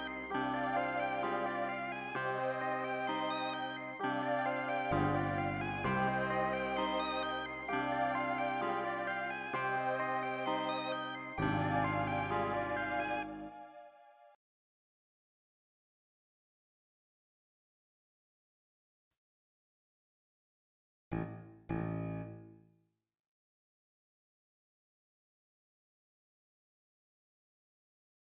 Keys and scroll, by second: 14.3 c, 15.3 super+l, 18.2 super+q, 19.0 super+l, 19.7 c, 20.3 p, 20.5 super+s, 22.4 super+l, 22.7 super+s, 23.4 e, 25.4 super+s.